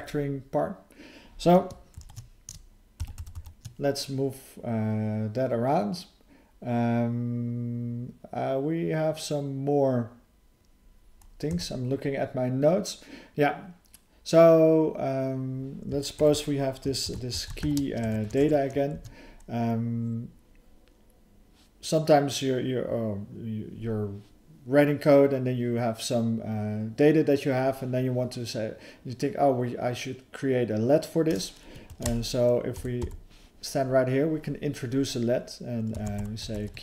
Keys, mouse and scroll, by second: 2.0 ctrl+s, 16.1 (.